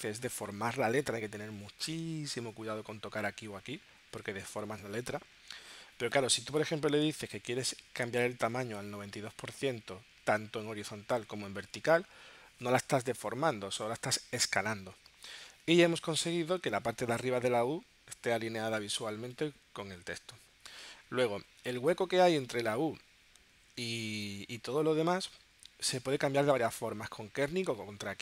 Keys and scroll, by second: 8.4 9.